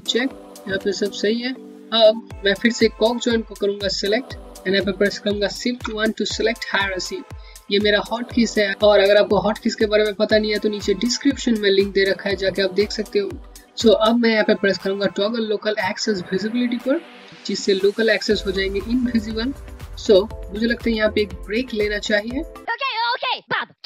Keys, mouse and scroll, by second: 0.4-1.7 scroll up 1, 1.8-2.2 scroll down 1, 2.2 click, 5.5 shift+1, 16.6 click.